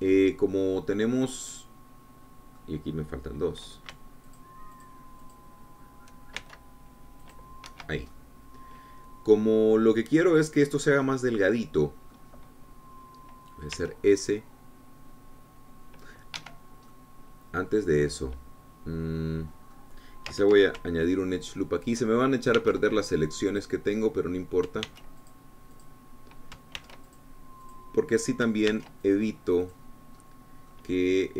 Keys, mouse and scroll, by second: 5.8 shift+click, 6.2 shift+click, 6.7 shift+click, 7.7 shift+c, 8.6 click, 9.1 Escape, 9.5-11.3 drag, 12.4-13.6 drag, 15.1 s, 17.7 Escape, 18.3-21.3 drag, 23.9 ctrl+r, 24.4 ctrl+click, 24.9 ctrl+click, 26.3 ctrl+r, 26.6 ctrl+click, 27.1 ctrl+click, 28.1 ctrl+r, 29.1 click, 30.1 ctrl+r, 30.7 ctrl+click, 31.0-31.3 drag.